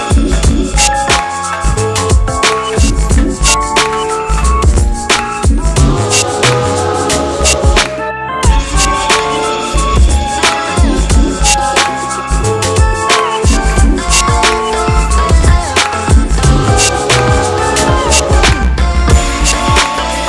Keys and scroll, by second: 5.5 F4, 10.5 KP_Add.